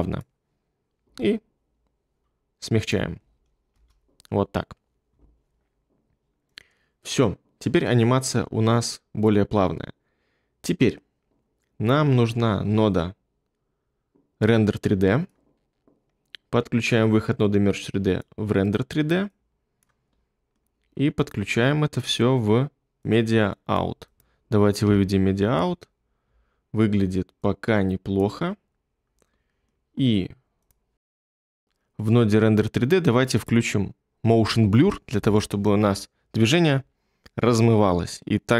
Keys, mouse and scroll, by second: 1.0 s, 24.8 2.